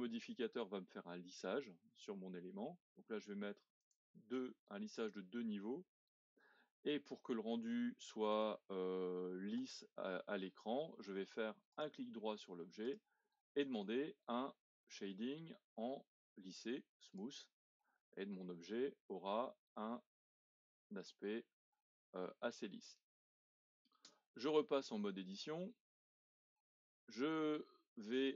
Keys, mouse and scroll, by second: 3.8 click, 4.8-7.2 middle drag, 7.2-8.5 scroll up 4, 8.5-10.9 middle drag, 10.9-11.7 scroll down 5, 11.7-16.0 right drag, 18.0-18.4 scroll up 1, 18.4-21.4 middle drag, 22.0-22.5 scroll up 1, 22.5-24.1 middle drag, 24.1 Tab, 24.6 middle click, 25.5 scroll down 1, 25.9 middle click, 26.8-27.8 scroll up 1, 27.8 scroll up 1.